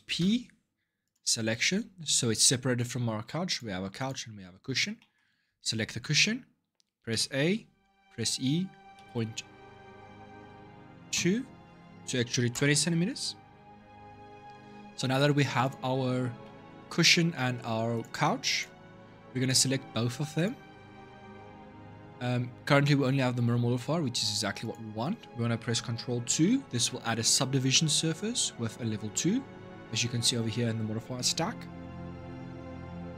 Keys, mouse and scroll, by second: 0.0 p, 2.2 Tab, 2.5 click, 3.2 click, 3.7 click, 4.7 middle click, 5.7 Tab, 6.9 a, 7.9 e, 14.3 Tab, 14.7-15.4 scroll down 2, 15.4 click, 16.2-17.7 middle drag, 17.7 click, 18.3 click, 20.1 shift+click, 24.4-26.1 drag, 26.1 ctrl+2, 32.4-33.1 middle drag.